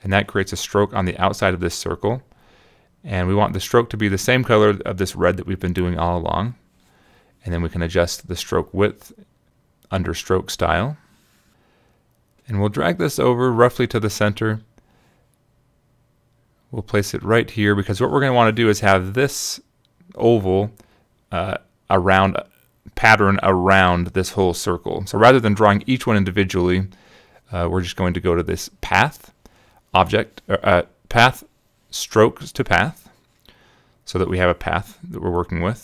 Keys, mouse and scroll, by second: 1.2 click, 2.7 click, 4.9 click, 5.9 click, 6.2 click, 8.4 click, 9.0 click, 11.6 click, 12.8-15.0 drag, 16.2-20.3 drag, 21.3 shift+click, 22.5 click, 23.6 click, 24.2 click, 25.1 click, 26.3 click, 29.8 click, 30.7-35.4 drag.